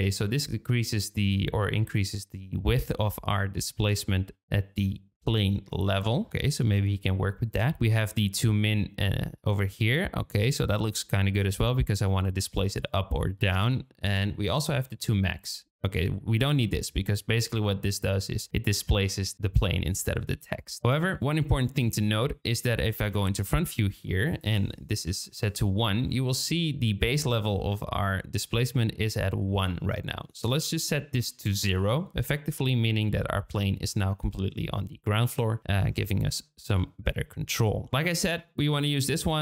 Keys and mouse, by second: 6.9 ctrl+z, 7.6-14.2 shift+drag, 14.8 shift+click, 15.5-19.3 shift+middle drag, 19.3-20.8 shift+drag, 21.2-21.8 drag, 23.0 KP_1, 24.4-25.5 drag, 30.6-31.9 drag, 33.2-33.8 drag, 37.8 shift+click, 38.0 shift+click, 38.7 click.